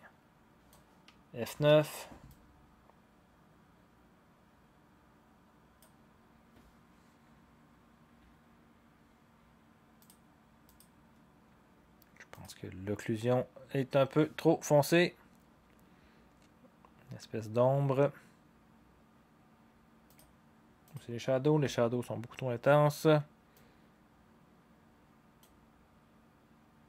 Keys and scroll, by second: 1.5 F9.